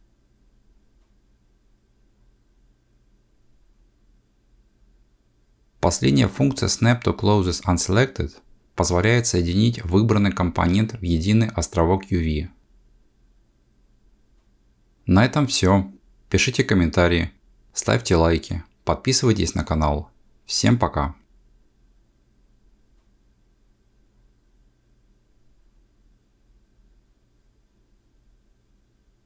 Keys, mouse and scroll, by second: 0.1 c, 1.9 click, 2.5 g, 6.6-7.3 scroll up 5, 8.0 g, 12.9 click, 14.6 g, 15.9 ctrl+z, 16.5 scroll down 1.